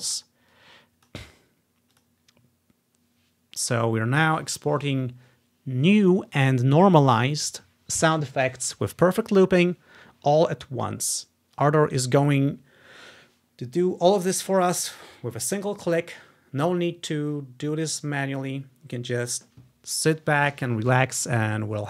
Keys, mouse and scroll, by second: 0.6-3.3 drag, 10.9-12.7 drag.